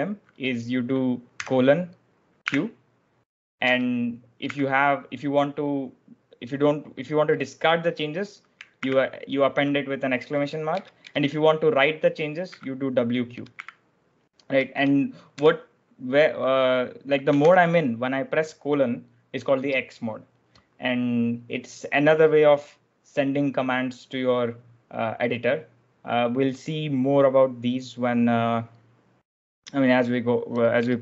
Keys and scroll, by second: 1.3 shift+;, 2.3 q, 3.6 BackSpace, 8.7 shift+1, 10.7 BackSpace, 10.9 BackSpace, 12.1-15.3 typing, 17.4 shift+;, 30.8 BackSpace.